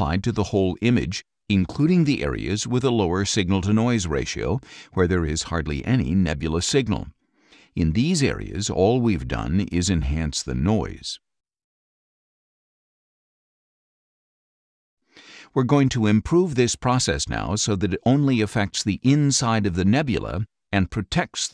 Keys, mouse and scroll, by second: 10.9 click, 12.1 click, 13.0 click, 14.3 click.